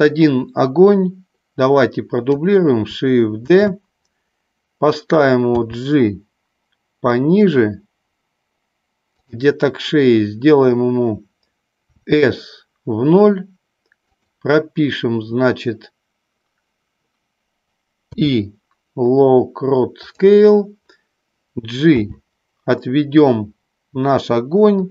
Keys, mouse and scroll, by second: 3.8 shift+d, 5.5 g, 9.3 click, 11.9 s, 14.3 click, 18.0 i, 22.0 g.